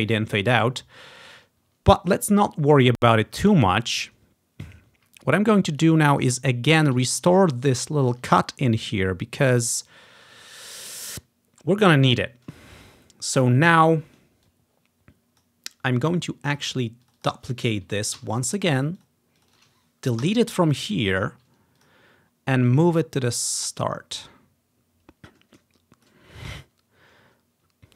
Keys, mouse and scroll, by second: 0.9-1.8 ctrl+scroll down 5, 3.1 scroll down 1, 4.4 scroll down 1, 4.6-5.2 scroll up 2, 5.9 click, 6.3 click, 6.7-8.3 drag, 7.1-8.6 ctrl+scroll up 1, 8.2 ctrl+i, 9.1-10.1 ctrl+scroll down 1, 12.5-17.1 ctrl+drag, 12.9-14.5 ctrl+scroll down 2, 17.9 ctrl+click, 18.2 ctrl+d, 18.7 scroll down 1, 19.0 click, 20.3 Delete, 22.1-22.7 scroll down 1, 22.7-27.7 drag, 23.4 typing, 27.7-27.9 ctrl+scroll up 2.